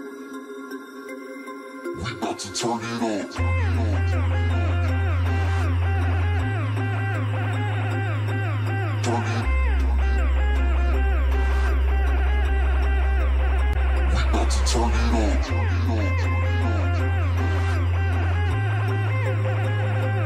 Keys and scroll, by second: 0.9 ctrl+space, 1.7 ctrl+space, 2.7 ctrl+space, 5.8 ctrl+space.